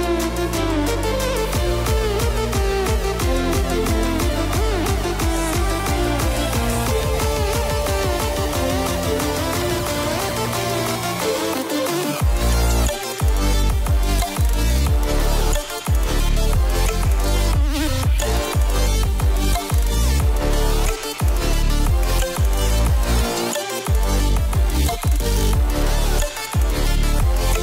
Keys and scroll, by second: 22.0 ctrl+alt+shift+e.